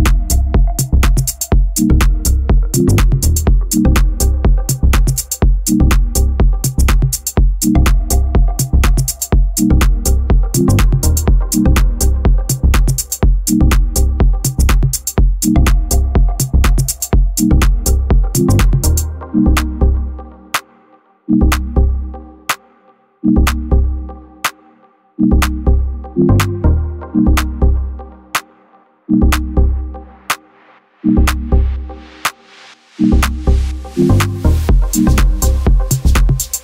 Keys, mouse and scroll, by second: 3.5 click, 4.0 middle click, 4.4 shift+a, 5.4 alt+middle click, 5.9 s, 6.6 g, 7.1 s, 7.8 s, 9.1 alt+middle click, 9.5 alt+middle click, 9.8 alt+middle click, 10.3 shift+middle drag, 10.5-10.9 scroll up 5, 10.9-11.2 shift+middle drag, 11.2 g, 11.9 s, 12.8 s, 14.0 g, 14.9-15.3 middle drag, 15.3-15.6 scroll down 3, 15.6 g, 16.9 g, 18.2 middle drag, 18.4-18.8 scroll up 5, 18.8 scroll down 1, 18.9 middle click, 19.3 g, 20.0 s, 21.7 g, 22.4 scroll down 3, 22.7-25.7 middle drag, 26.1-29.7 shift+middle drag, 30.0 alt+middle drag, 30.5 shift+middle click, 30.9 g, 32.3-32.8 middle drag, 32.8 scroll up 3, 33.1 middle click, 33.5 s, 34.4 g, 35.7 alt+middle click, 36.0 alt+middle click, 36.4-36.6 scroll up 1.